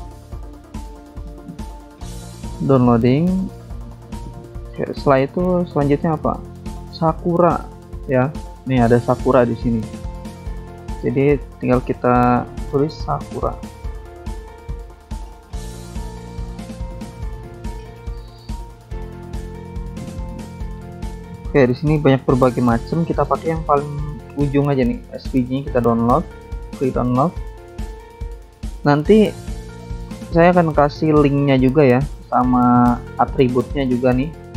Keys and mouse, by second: 5.7 click, 6.4 click, 7.8 click, 8.7 click, 9.3 alt+Tab, 10.4 click, 10.6 click, 11.6 alt+Tab, 12.3 click, 13.0-14.7 typing, 23.2 click, 23.3 click, 25.2 click, 25.3 click, 26.5 click, 34.3 click, 34.4 click, 34.5 click.